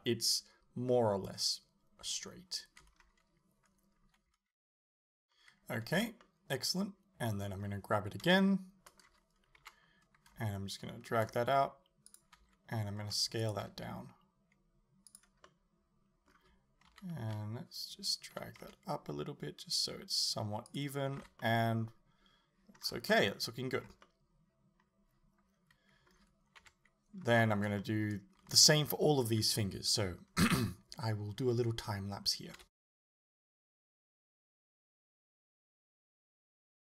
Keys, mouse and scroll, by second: 3.0-5.4 scroll up 1, 5.4-12.2 middle drag, 6.0 a, 8.3 l, 9.6 KP_7, 11.1 shift+d, 12.2 click, 12.4 s, 13.5 click, 13.7 g, 15.2 click, 15.5-20.8 middle drag, 16.9 KP_1, 17.3 KP_3, 18.4 g, 20.8 click, 21.2 a, 21.4-24.1 middle drag, 22.9 scroll down 2, 23.8 scroll up 1, 26.6 KP_7, 27.3 scroll up 1, 27.8 shift+middle click, 28.5 a, 32.6-36.9 typing, 33.2 right click, 33.6 click, 34.3 click, 34.8 click, 34.9 right click, 35.2 click, 35.4 middle click, 35.6 right click, 36.0 middle click, 36.3 right click, 36.6 right click.